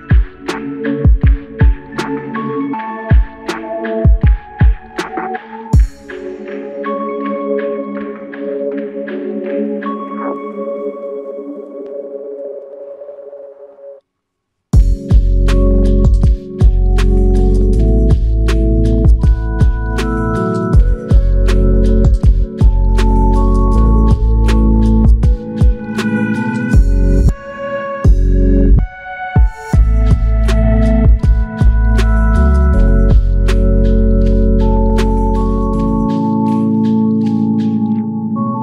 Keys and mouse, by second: 7.1 double click, 24.6 alt+click, 25.8 alt+click, 27.6 alt+click, 32.6 alt+click, 36.9 alt+click, 38.3 alt+click.